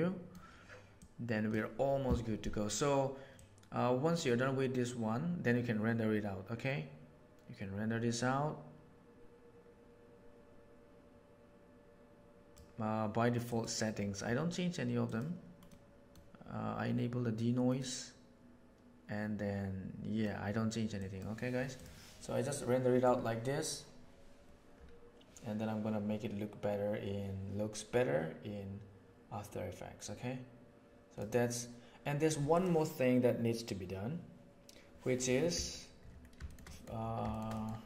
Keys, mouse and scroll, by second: 1.0-1.5 drag, 3.3-7.8 drag, 11.9-12.5 drag, 13.4 click, 15.0 click, 15.7 middle click, 17.9-20.2 middle drag, 21.0 click, 23.0-23.5 drag, 23.5-31.1 right drag, 32.5 middle click, 36.6 middle click.